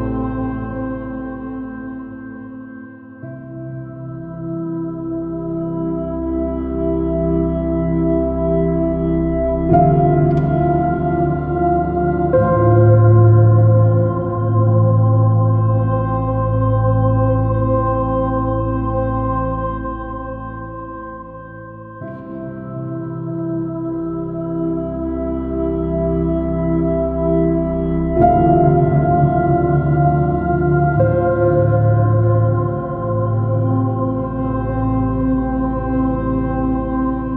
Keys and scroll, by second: 9.9 super+z, 12.5 s, 19.6 b, 20.1 x, 23.9 super++, 27.3 space, 27.5 super+0, 30.1 super+-, 31.6 super++.